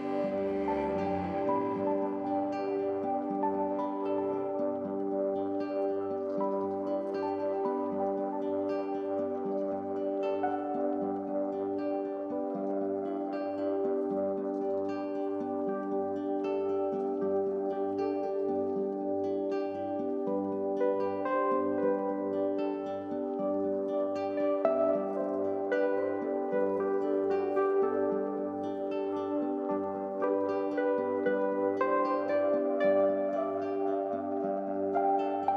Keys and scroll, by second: 12.5 ctrl+z, 13.2 x, 14.9 ctrl+z, 20.4 ctrl+z, 21.0 ctrl+z, 33.7 ctrl+z.